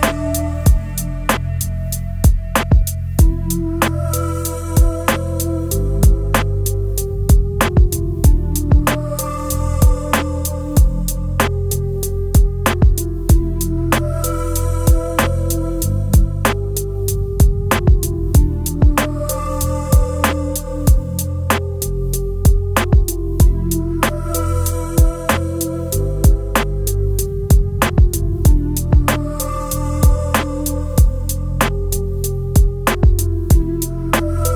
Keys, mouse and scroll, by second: 1.5 alt+scroll up 1, 10.7-11.9 space, 21.0 right click, 24.3 shift+click, 27.0 Up, 28.1 Up.